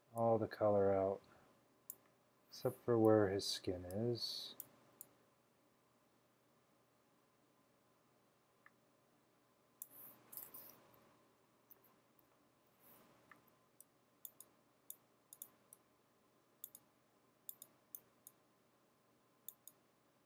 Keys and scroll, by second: 3.1-3.5 typing, 4.7 [, 11.0 super+-, 11.4 super+-, 13.3-13.6 typing.